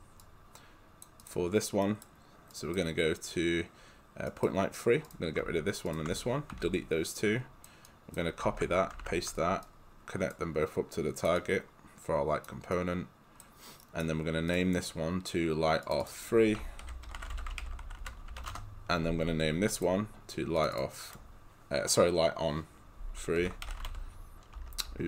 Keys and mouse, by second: 0.2 click, 1.9 right click, 2.6 click, 4.3 right click, 5.1 click, 5.9 ctrl+click, 6.6 Delete, 7.2 click, 8.6 ctrl+c, 9.1 ctrl+v, 9.6 click, 13.8 right click, 14.5 click, 16.6-18.8 typing, 19.8 click, 23.2-25.0 typing.